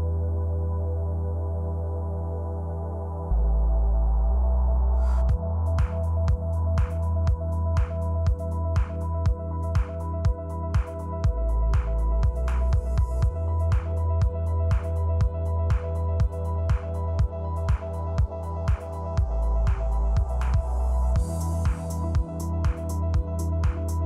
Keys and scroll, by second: 0.0 super+Right, 1.0 super+d, 1.9 super+Left, 2.3 shift+Right, 2.6 super+d, 3.3 super+Left, 3.6 shift+Right, 4.7 super+d, 5.3 shift+super+Right, 5.5 shift+Left, 7.3 super+Right, 8.0 super+d, 8.8 shift+super+Left, 9.3 super+d, 9.9 shift+super+Left, 10.4 super+d, 11.6 shift+super+Left, 11.7 shift+Right, 11.9 super+d, 13.4 super+Left, 14.4 super+d, 14.9 super+Right, 15.2 shift+Left, 15.8 super+d, 16.9 shift+Left, 17.3 shift+super+d, 19.0 shift+super+Right, 19.4 shift+Left, 19.6 super+d, 20.6 shift+super+Left, 21.0 shift+Right, 21.9 super+d, 22.5 shift+super+Left, 23.2 super+d.